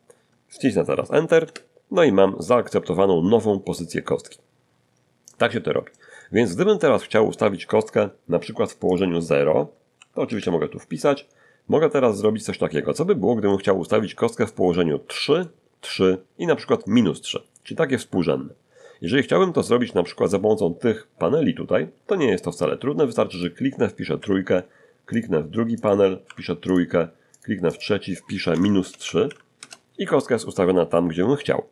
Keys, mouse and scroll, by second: 1.4 Return, 4.2-5.4 middle drag, 6.2-7.2 middle drag, 8.9 click, 9.9 0, 10.2 Return, 12.7 middle click, 13.8 middle click, 19.2-20.4 middle drag, 23.3 click, 24.2 3, 25.1 click, 25.8 click, 26.2 3, 26.7 click, 27.3 click, 27.7 click, 28.5-29.2 typing, 29.6 Return.